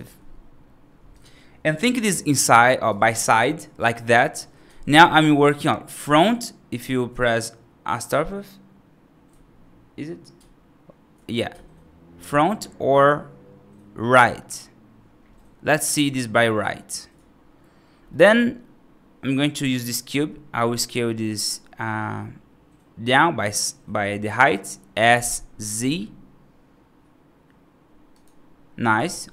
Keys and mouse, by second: 1.0 click, 1.8-2.8 right drag, 12.8 `, 15.2-15.6 middle drag, 18.0 middle drag, 25.0 s.